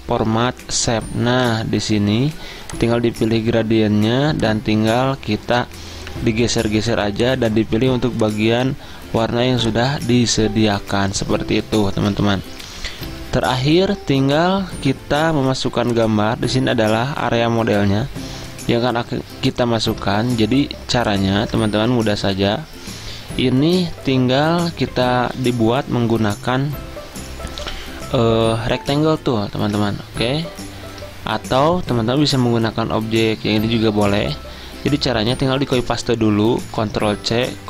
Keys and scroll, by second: 12.3 ctrl+z, 12.7 ctrl+z, 13.1 ctrl+z, 13.6 ctrl+z, 37.3 ctrl+c.